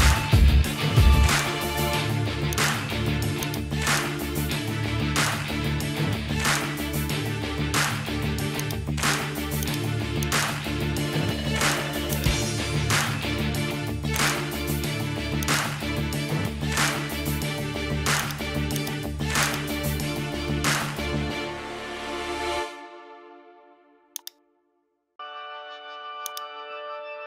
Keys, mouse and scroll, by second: 0.7 middle click, 2.6 click, 5.5 Tab, 6.4 shift+middle click, 8.6 click, 9.1 l, 9.7 click, 10.9 l, 14.3-15.5 drag, 18.2 click, 18.7 click, 19.9 l, 20.7 l, 24.2-26.3 drag.